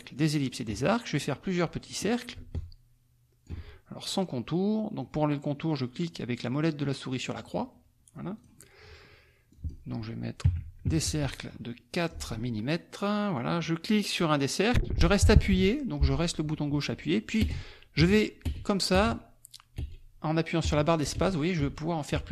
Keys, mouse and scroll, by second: 0.0-1.1 middle drag, 0.4-0.8 scroll up 1, 1.8 click, 2.5-3.6 ctrl+drag, 7.3 middle click, 8.3 click, 9.5 click, 10.4 KP_4, 10.6 Tab, 10.8 KP_4, 11.0 Tab, 12.0 click, 13.3-22.3 drag, 17.4 space, 18.5 space, 19.8 space, 20.6 space.